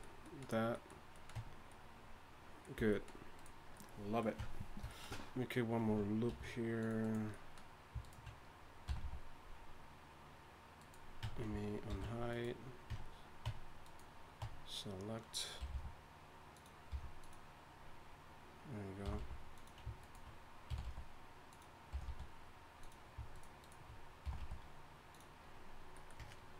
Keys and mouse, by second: 1.3 Tab, 2.8 a, 4.4 Tab, 6.3 ctrl+r, 8.0 click, 8.9 g, 11.2 Tab, 11.9 alt+h, 13.2 Tab, 13.5 Tab, 14.4 Tab, 15.6 g, 16.9 g, 19.0 g, 20.7 g, 21.9 g, 24.2 g.